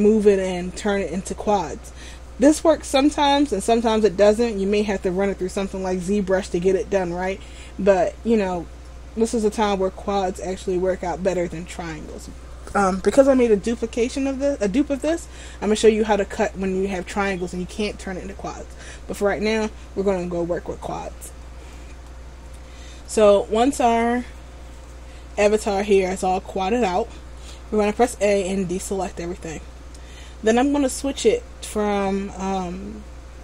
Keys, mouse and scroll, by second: 22.2 shift+middle click, 26.1 shift+middle click, 28.1 a.